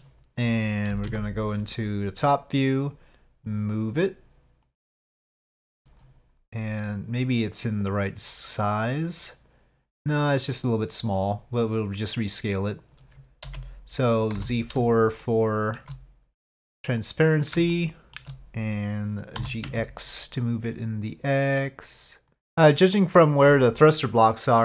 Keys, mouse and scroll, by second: 0.9 KP_5, 1.1 KP_7, 4.7-5.7 drag, 7.9-9.8 drag, 12.1 click, 13.5 z, 15.3-15.9 shift+middle drag, 17.8 shift+middle drag, 18.1 shift+click, 19.4 g.